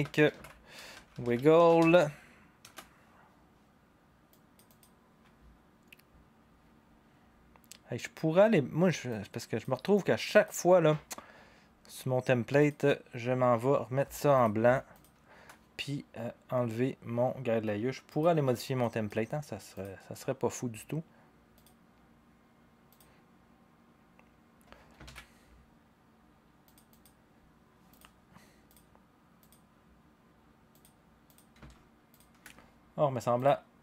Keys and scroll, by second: 0.0-2.3 typing, 2.6 Return, 5.6-6.4 typing, 25.0 ctrl+s.